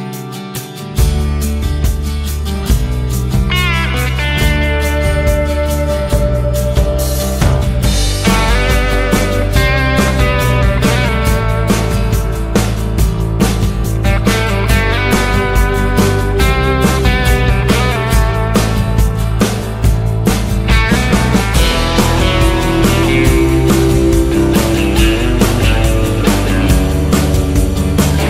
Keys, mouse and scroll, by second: 0.5-2.7 typing, 4.2 a, 4.4 Tab, 5.2 Tab, 5.9 l, 6.1 Tab, 6.2 Tab, 6.5 Tab, 10.9 Tab, 11.4 Tab, 14.7 BackSpace, 21.0 Tab, 21.4 ctrl+l, 22.8 a, 22.9 Tab, 23.1 a, 26.5-28.2 typing.